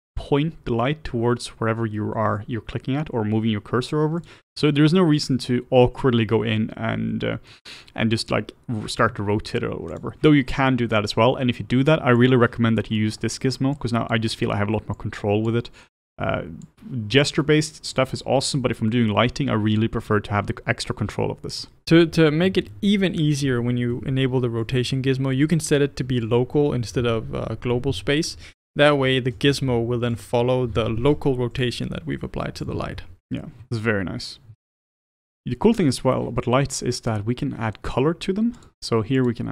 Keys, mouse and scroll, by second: 4.6-7.6 middle drag, 9.2 r, 12.3 click, 13.0 middle click, 13.7-21.6 drag, 21.6-23.1 middle drag, 23.2-24.7 middle drag, 24.7-30.2 drag, 31.6-33.0 drag, 33.0-34.1 middle drag, 34.1-34.6 scroll up 1, 34.6-38.8 shift+middle drag, 38.8 click, 39.3 click.